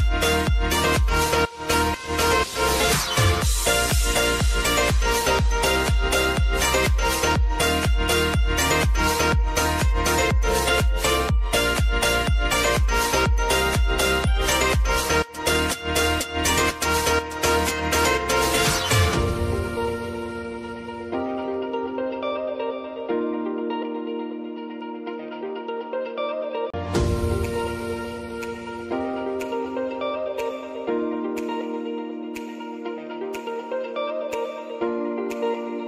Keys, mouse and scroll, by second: 0.1 space, 1.6 click, 2.7 space, 4.8 space, 5.3 click, 5.7 space, 8.8 space, 12.1 space, 12.8 click, 14.0 ctrl+d, 15.3-19.3 drag, 19.3 t, 20.1 click, 21.3 Return, 22.1 space, 23.9 click, 24.8 ctrl+a, 25.3 f, 27.4 click, 28.9 space, 30.5 click, 31.0 space, 31.9 click, 32.7 [, 33.2 space, 34.3 click, 34.7 [, 35.2 space.